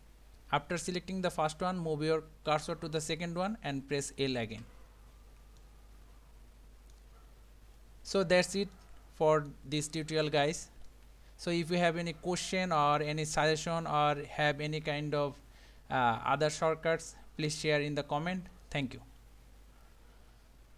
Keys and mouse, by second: 4.5 l, 5.7-6.9 middle drag, 8.1 click, 8.8 middle click, 10.3 Tab, 10.9-12.8 middle drag.